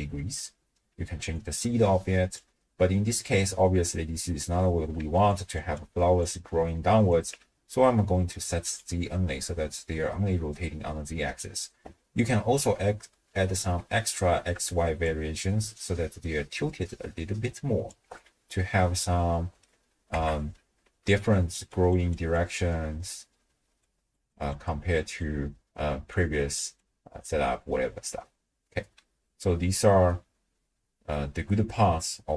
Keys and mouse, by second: 1.4-2.4 drag, 3.1-4.6 middle drag, 5.0-7.3 typing, 5.3 click, 5.7 click, 6.6 click, 8.7 click, 9.4-10.0 middle drag, 15.0-17.9 shift+drag, 18.7-19.6 middle drag, 20.1-27.4 typing, 21.2 click, 21.7 click, 22.1 click, 23.8 click, 24.3 click, 25.0 click, 26.1 click, 26.8 click, 27.5-28.7 drag, 28.7 d, 28.8 d.